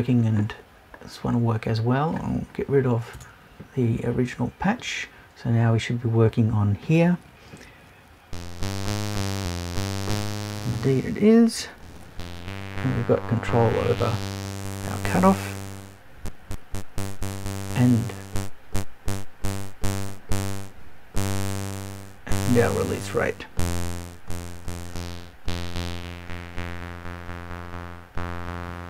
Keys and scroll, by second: 3.1 BackSpace.